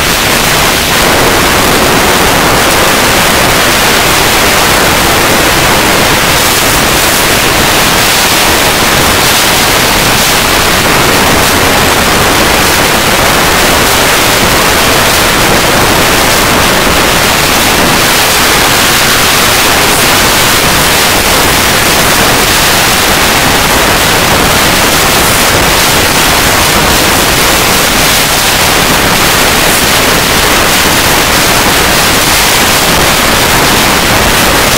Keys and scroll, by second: 0.9 p, 1.0-2.0 Down, 2.1 Down, 2.5 Down, 2.7 Return.